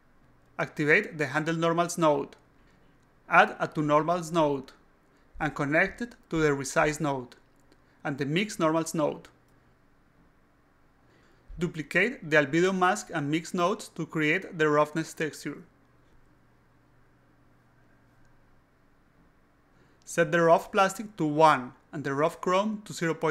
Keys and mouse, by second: 0.8 click, 1.4-2.9 drag, 3.4 click, 4.0 click, 6.2-7.5 drag, 8.6-11.0 drag, 12.7 click, 14.0-15.5 shift+drag, 16.0 click, 17.0 click, 17.1 click, 18.0 click, 18.3-19.5 typing, 19.6 click, 20.2 click, 21.1 alt+click, 22.5 click.